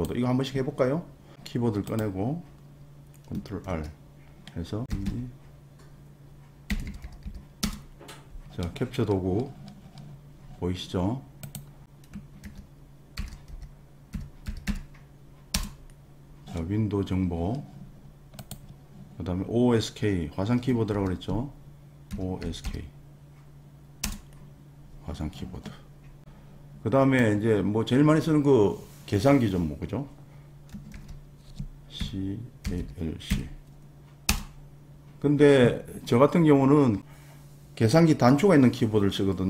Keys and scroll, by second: 3.7 super+r, 4.7-7.7 typing, 12.4 super+r, 12.9-15.2 typing, 15.5 Return, 20.9 super+r, 21.8-23.2 typing, 24.0 Return, 25.2 n, 30.9 super+r, 32.0-33.3 typing, 34.3 Return.